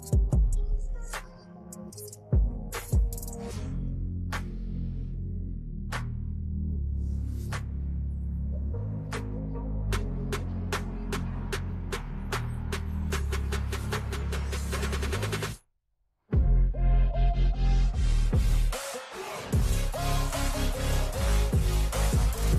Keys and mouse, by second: 0.9 click, 4.3 click, 5.0 click, 5.9 Return, 8.4 Left, 9.2 Right, 9.5 Up, 9.7 Up, 9.9 Up, 10.1 Up, 10.6 Down, 11.3 Right, 11.9 Return, 12.8 u, 13.8 click, 15.1 click, 17.4 v, 19.4 Down, 20.3 click, 21.2 click.